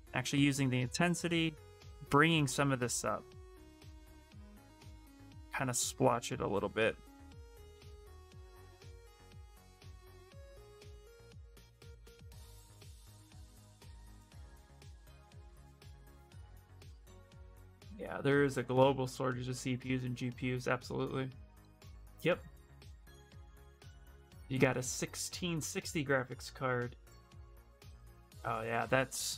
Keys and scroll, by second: 13.1 ctrl+z.